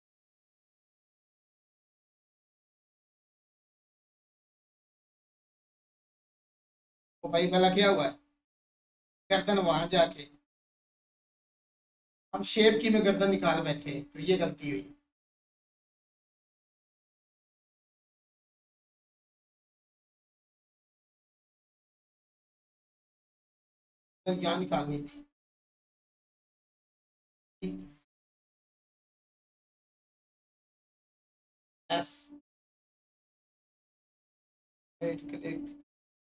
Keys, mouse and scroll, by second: 2.7-7.8 alt+drag, 7.8-13.6 drag, 22.7 Tab, 23.3-23.8 scroll up 1, 23.8 alt+click, 25.2 shift+click, 29.7 click, 32.9 click, 34.2 right click, 35.8 click.